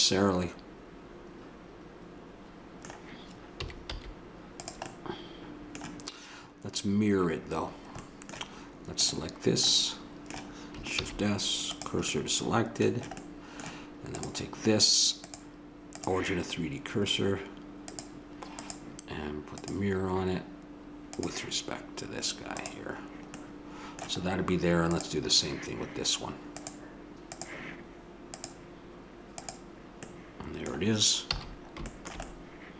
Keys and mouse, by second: 3.5 s, 8.9-9.7 right drag, 9.7-10.9 middle drag, 10.9 shift+s, 14.1-15.3 right drag, 15.3-16.8 drag, 17.9-19.7 drag, 20.2 click, 21.1-23.3 drag, 23.3-23.8 middle drag, 24.9-26.3 right drag, 26.3-30.0 drag, 31.3 a.